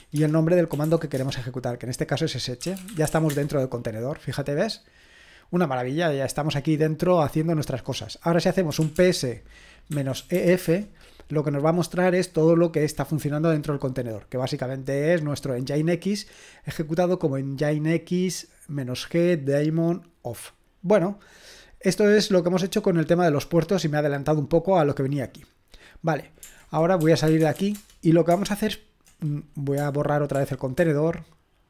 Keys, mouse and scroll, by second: 0.0-3.6 typing, 8.5-10.8 typing, 15.3-19.9 drag, 20.0-22.1 scroll down 1, 22.1-23.0 scroll down 1, 23.0-24.2 scroll down 1, 24.2-25.6 scroll down 1, 25.6 scroll down 1, 25.9-27.0 drag, 26.8-28.0 typing, 30.4 ctrl+p, 30.8 ctrl+p.